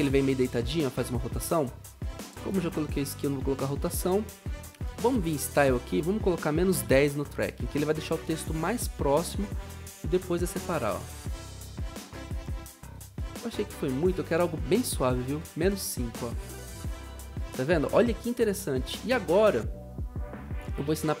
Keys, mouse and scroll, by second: 6.5-7.2 typing, 10.7 typing, 14.9-16.2 typing.